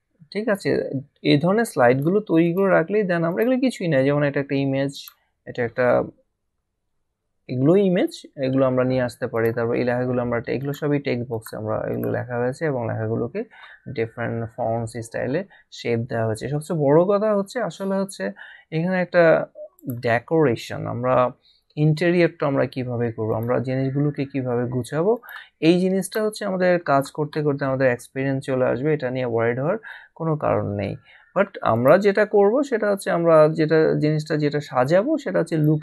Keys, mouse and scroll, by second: 1.9 click, 4.9 click, 9.3 click, 19.7 click, 23.3 click, 25.1 click, 31.7 click, 35.5 click.